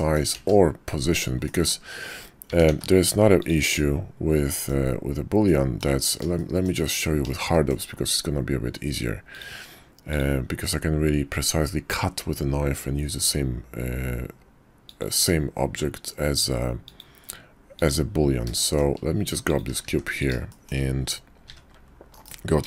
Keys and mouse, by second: 0.3 ctrl+z, 1.4 drag, 2.4 s, 3.8-4.7 drag, 5.4-5.8 drag, 6.4 shift+drag, 7.5 shift+middle drag, 7.6 shift+click, 9.4-10.2 drag, 18.6 shift+drag, 19.9 shift+d, 20.5 shift+click, 21.5 `, 22.1 KP_5.